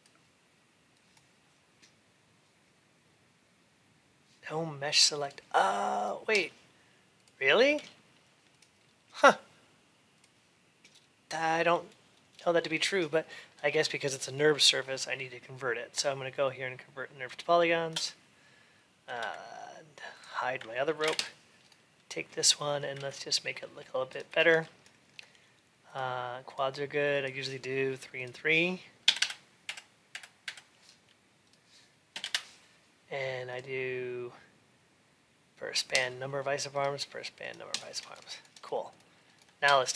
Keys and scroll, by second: 20.8 ctrl+h, 22.9 ctrl+a, 29.0 Tab, 32.0 Return.